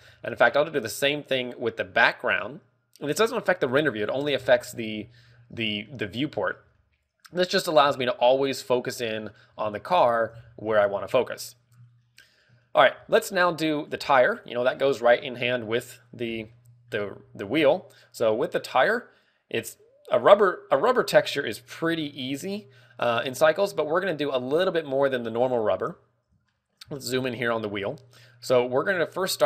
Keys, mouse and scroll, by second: 0.2 a, 0.9 right click, 1.9 click, 4.7 scroll down 2, 4.9-6.1 scroll up 11, 6.4 middle click, 6.9 scroll up 2, 7.1 a, 7.3 middle click, 8.0 shift+middle click, 8.4-8.7 scroll up 2, 9.0 right click, 9.0 scroll up 1, 9.3 middle click, 10.1 scroll up 1, 10.9 scroll up 1, 11.2 middle click, 11.9 shift+middle click, 12.2-12.6 scroll down 3, 12.5 middle click, 13.2 shift+middle click, 13.5 scroll up 1, 14.1 scroll up 5, 14.7 ctrl+w, 15.3 scroll up 1, 15.7 shift+middle click, 16.0 scroll up 2, 17.7 z, 18.0 right click, 24.8 click, 26.2 scroll up 6, 27.0 shift+middle click, 27.4 scroll up 1, 27.7 shift+middle click, 29.3 click.